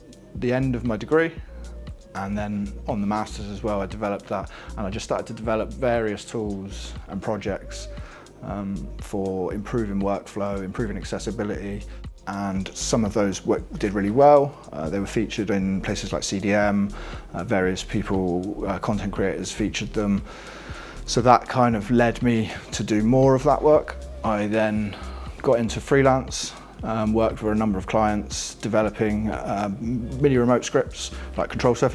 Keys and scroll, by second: 0.8 alt+Down, 1.7 alt+Right.